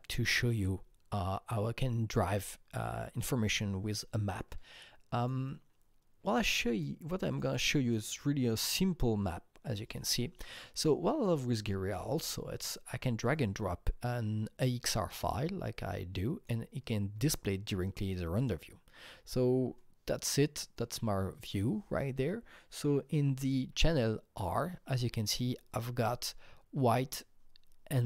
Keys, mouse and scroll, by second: 6.7 click, 7.3 click, 7.4 double click, 8.6 double click, 9.7-19.7 drag, 19.7-23.3 drag, 25.0 click, 25.0 r.